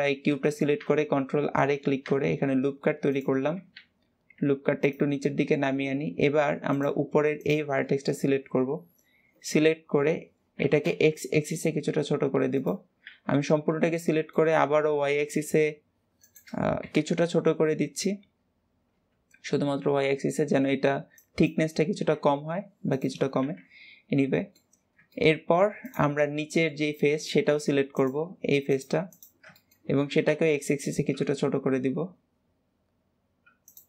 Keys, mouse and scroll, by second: 0.0-0.3 scroll up 1, 0.3-2.1 shift+middle drag, 2.1 ctrl+r, 5.1-6.6 middle drag, 6.6 click, 7.2 click, 7.7-10.4 middle drag, 10.4 s, 13.4-14.5 middle drag, 14.5 s, 23.2 KP_1, 24.2 shift+middle click, 24.6-25.0 scroll up 1, 25.0 shift+middle click, 25.7 click, 26.1-27.8 middle drag, 27.8 click, 28.6 click, 29.0 click, 29.4 shift+middle click, 30.0 s.